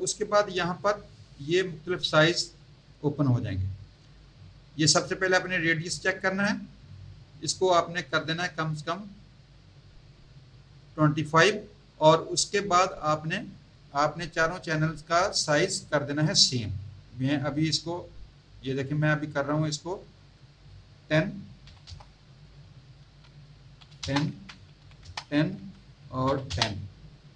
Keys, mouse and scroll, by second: 8.1 click, 18.6 click, 19.4 click, 21.6 KP_1, 21.8 KP_0, 22.9 Tab, 23.7 KP_1, 24.0 KP_0, 24.7 KP_1, 25.0 KP_0, 25.5 Tab, 26.2 KP_1, 26.4 KP_0.